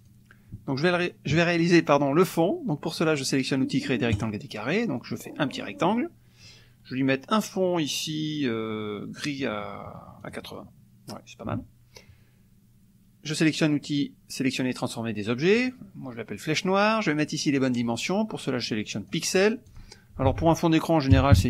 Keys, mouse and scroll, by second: 0.0 click, 4.2 click, 4.9-6.0 drag, 10.2 click, 15.6 click, 17.6-19.3 drag, 19.9 click, 20.2 ctrl+a, 21.1-21.4 typing.